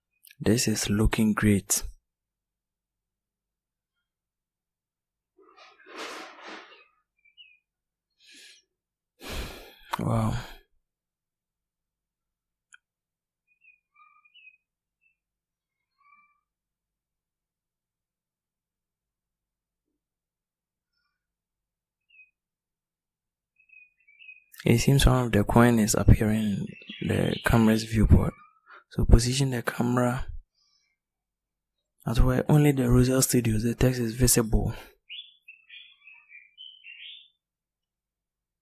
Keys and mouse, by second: 16.5-19.0 drag.